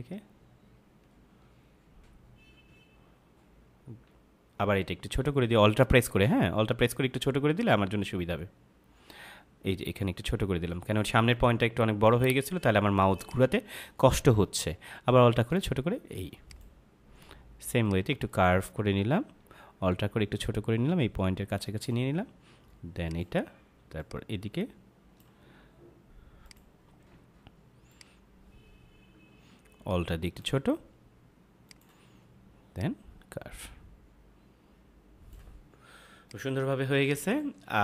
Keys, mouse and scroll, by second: 7.5 click, 13.2 click, 16.4 click, 23.0 click, 31.6 click, 36.0 space, 36.2 click, 36.5 space.